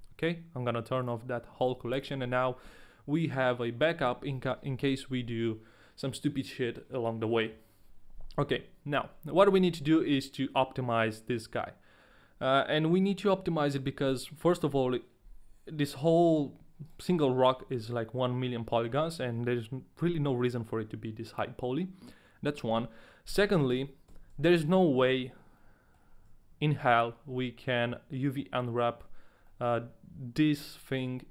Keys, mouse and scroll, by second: 1.0 click, 1.6 right click, 2.0 Return, 2.0 ctrl+a, 2.0 click, 2.0 right click, 9.5 a, 16.9 right click, 17.5 a, 23.7 right click, 25.4 Tab, 25.5 middle click, 26.0-26.6 scroll up 2, 26.8 Tab, 26.8 shift+middle click, 26.8 a, 27.0-27.3 scroll down 1, 27.3 middle click, 28.6 middle click, 29.4 middle click, 29.7-30.1 scroll up 2.